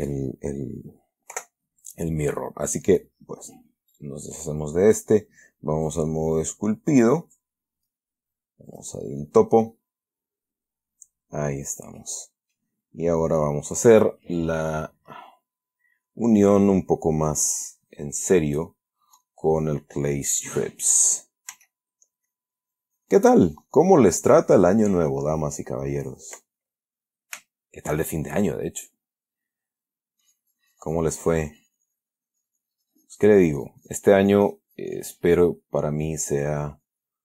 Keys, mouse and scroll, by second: 1.7 Delete, 2.1 click, 4.2 right click, 6.2 click, 7.2 click, 9.0 click, 12.3-13.0 middle drag, 13.1-13.6 scroll up 1, 18.9 click, 19.5 click, 21.8 f, 22.6-26.9 drag, 27.1-27.8 middle drag, 27.8 shift+middle click, 30.5-35.5 drag, 35.6-36.1 middle drag, 36.8-37.2 drag.